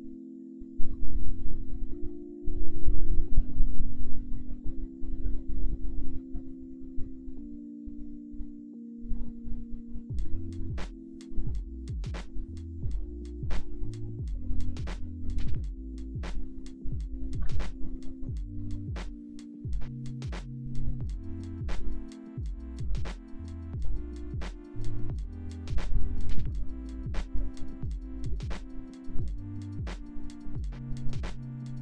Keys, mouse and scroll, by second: 0.2 click, 0.8 click, 1.4 click, 2.4 ctrl+shift+middle click, 3.1 middle click, 3.8 shift+x, 3.9 click, 4.1 click, 4.4 middle click, 5.0 shift+x, 5.4 middle click, 6.0 alt+F13, 6.0 shift+x, 6.1 click, 6.4 middle click, 6.6 middle click, 6.9 click, 7.5 /, 7.7 shift+middle click, 7.9 middle click, 8.0 click, 8.4 middle click, 8.5 shift+middle click, 8.6 middle click, 9.3 middle click, 9.5 middle click, 9.7 ctrl+s, 9.9 /, 10.1 ctrl+s, 10.1 middle click, 11.1 middle click, 11.3 shift+middle click, 11.6 middle click, 12.4 shift+middle click, 13.4 ctrl+z, 13.5 ctrl+z, 13.7 ctrl+z, 13.8 middle click, 14.2 f, 14.3 ctrl+z, 14.4 ctrl+z, 14.6 middle click, 15.0 ctrl+z, 15.3 ctrl+z, 16.1 ctrl+z, 16.6 ctrl+z, 16.6 ctrl+z, 17.1 f, 17.4 shift+x, 17.5 click, 17.7 click, 17.9 shift+x, 18.1 click, 18.2 shift+x, 18.3 click, 19.2 ctrl+s, 20.6 alt+s, 20.8 shift+x, 23.5-25.3 middle drag, 25.3 click, 25.5 click, 26.5 ctrl+z, 26.8 click, 27.6 shift+x, 27.7 click, 27.9 ctrl+z, 28.0 click, 28.5 middle click, 28.6 click, 28.9 click, 29.1 middle click, 29.3 click, 29.4 middle click, 29.6 middle click, 29.7 click, 30.3 click, 30.5 ctrl+z, 30.8 middle click, 30.9 middle click, 31.2 shift+x, 31.5 click.